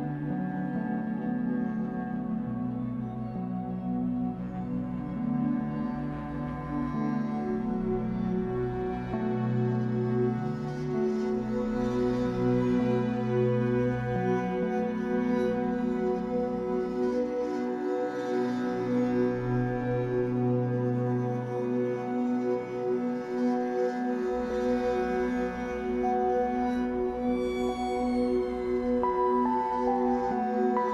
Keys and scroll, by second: 0.3 shift+Tab, 1.5 Escape, 1.8 3, 3.5 w, 8.7 Escape, 10.9 Escape, 11.8 w, 14.3 Escape, 14.6 3, 15.5 shift+Tab, 16.0 Escape, 21.2 shift+w, 21.9 Escape, 30.4 shift+w.